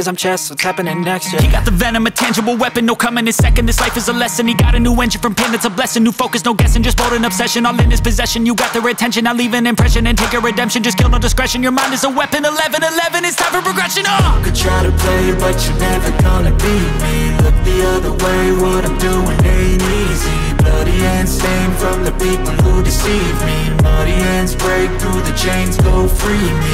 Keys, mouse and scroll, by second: 0.5 click, 1.6 click, 2.5 click, 5.1 click, 6.3-7.5 drag, 10.6 click, 11.8 click, 13.6 click, 15.0 space, 20.1 space, 21.7 click, 22.9 click, 24.2 click, 24.5 space.